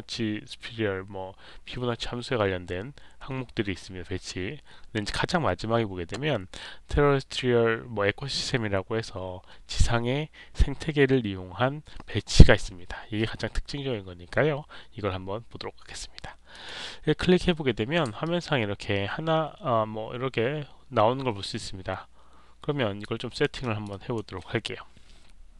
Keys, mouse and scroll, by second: 16.4 click, 18.1-22.9 alt+drag, 23.1 alt+right click, 23.5 alt+click, 23.8 alt+right click.